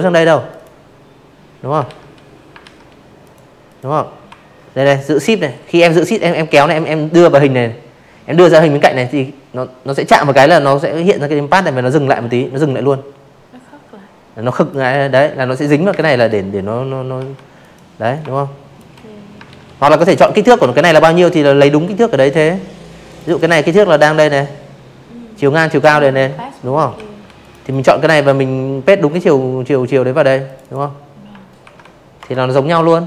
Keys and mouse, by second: 0.2 click, 0.6 click, 1.7-11.6 shift+drag, 12.8 space, 12.9 click, 14.1 v, 14.5 click, 15.1 shift+click, 16.4 ctrl+z, 16.8 click, 17.0 click, 17.5 ctrl+z, 20.0 click, 20.2 click, 23.9 ctrl+c, 24.4 click, 24.7 click, 27.4 click, 27.6 click, 28.5 ctrl+v, 30.6 click, 31.1 click, 32.2 click, 32.5 click, 32.9 right click.